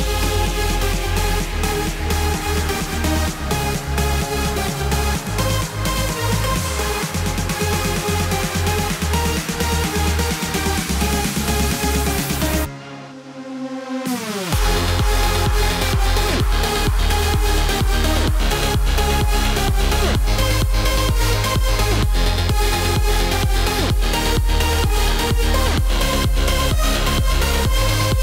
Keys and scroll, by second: 17.3 alt+BackSpace.